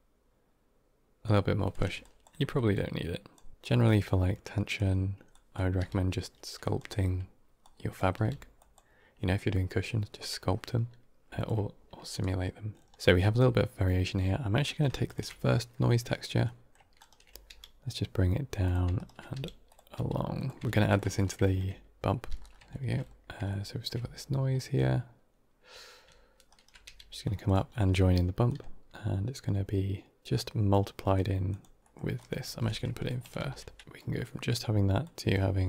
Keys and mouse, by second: 1.6 click, 1.9 alt+click, 2.6 click, 3.5 x, 3.8 click, 5.2 click, 5.7 g, 7.5 click, 8.0 g, 11.3 g, 12.8 middle click, 12.9 ctrl+x, 14.5 middle click, 14.9 ctrl+shift+click, 16.3 middle click, 17.3 g, 19.2 g, 19.8 g, 20.7 middle click, 21.3 middle click, 22.2 g, 22.6 middle click, 23.5 shift+middle click, 24.6 middle click, 26.7 g, 27.6 middle click, 28.3-28.9 drag, 30.2 shift+d, 30.6-31.0 drag, 31.4-31.8 drag, 31.8 middle click, 32.0 click, 32.4 alt+s, 32.9 drag, 33.3 ctrl+x, 34.9 click.